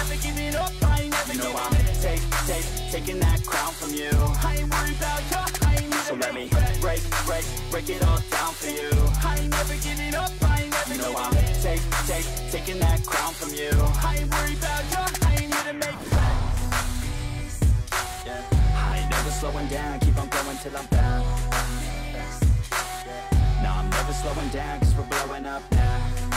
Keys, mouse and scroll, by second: 0.1 ctrl+v, 1.2 BackSpace, 1.4 2, 3.0 double click, 4.3 ctrl+c, 7.1 shift+1, 8.3-9.0 typing, 10.2 3, 12.2 ctrl+c, 13.7 double click, 14.7 ctrl+v, 15.6 BackSpace, 16.0 4, 18.1 double click, 19.4 ctrl+v, 20.4 BackSpace, 20.9 5.